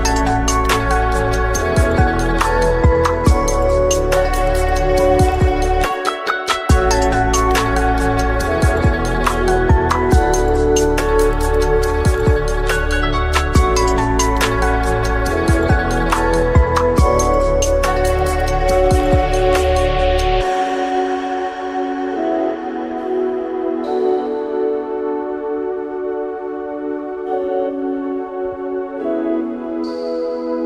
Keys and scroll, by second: 0.4 2, 0.5 Return, 6.5-7.3 typing, 6.7 Return, 7.4 Return, 10.8 5, 10.9 Return, 17.6 Tab, 18.0 Delete, 21.6 ctrl+x, 23.5 Delete, 25.5 Delete, 28.9 Delete.